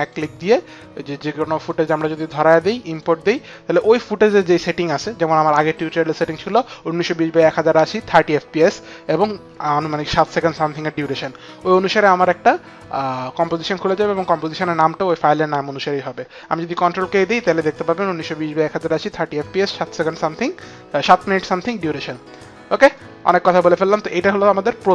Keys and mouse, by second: 0.1 click, 1.8 click, 3.1 click, 17.4 ctrl+k, 22.1 click, 23.1 click, 24.1 click.